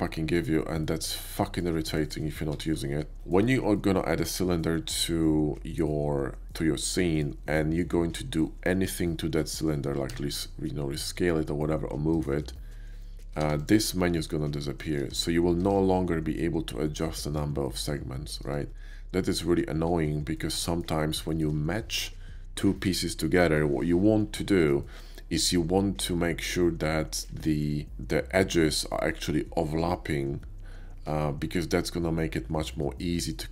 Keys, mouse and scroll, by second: 0.2 click, 0.7-1.2 middle drag, 1.5 shift+middle click, 1.9 middle click, 2.5 alt+v, 3.2 shift+middle drag, 3.7-7.0 shift+middle drag, 10.1 s, 12.1 click, 13.5 g, 13.6 click, 15.0 ctrl+z, 15.5 Tab, 15.7 ctrl+z, 19.5 Tab, 20.3-20.8 middle drag, 21.3 shift+middle click, 24.7-25.4 middle drag, 27.0 shift+middle click.